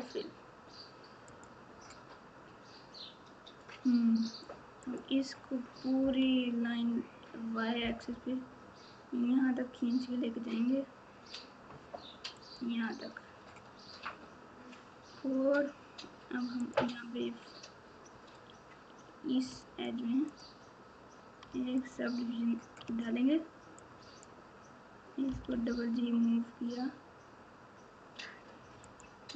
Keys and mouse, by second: 1.3 click, 19.6 click, 20.3 click, 22.8 1, 23.9 click.